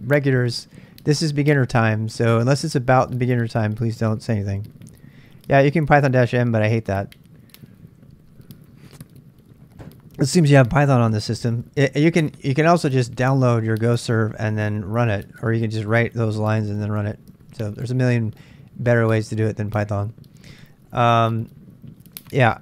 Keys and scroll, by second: 19.7-20.8 typing.